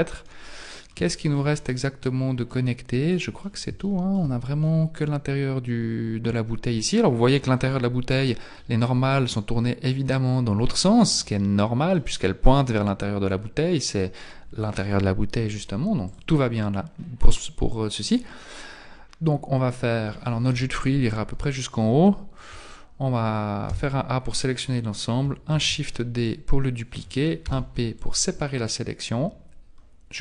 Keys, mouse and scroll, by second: 0.3 middle click, 1.1 shift+middle click, 1.6 middle click, 3.1 middle click, 3.9 shift+middle click, 4.7 middle click, 9.9 click, 10.9 middle click, 12.1-12.8 scroll down 1, 16.1 click, 20.5 KP_1, 21.7 shift+middle click, 23.7 a, 25.5 shift+d, 27.5 p.